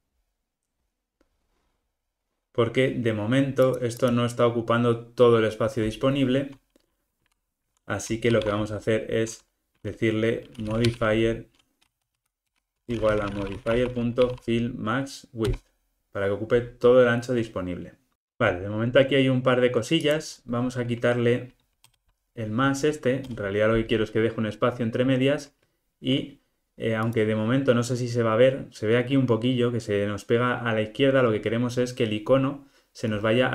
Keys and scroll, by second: 12.6 Return.